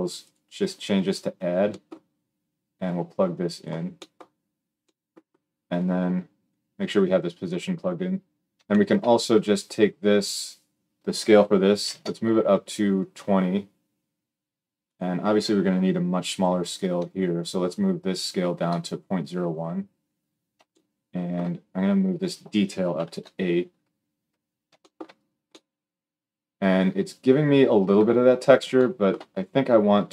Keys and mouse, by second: 0.0-30.1 drag.